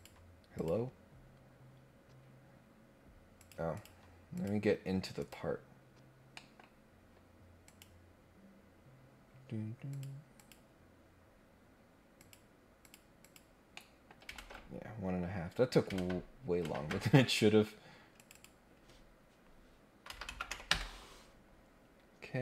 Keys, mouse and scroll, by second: 0.5 click, 3.4 click, 3.7 click, 4.3 click, 5.2 click, 6.3 middle click, 6.9 scroll up 1, 7.6 click, 9.9 click, 10.3 click, 12.2 click, 12.8 click, 13.2 click, 13.7 middle click, 14.3 ctrl+Tab, 15.9 ctrl+Tab, 16.6 ctrl+Tab, 18.2 click, 18.3 click.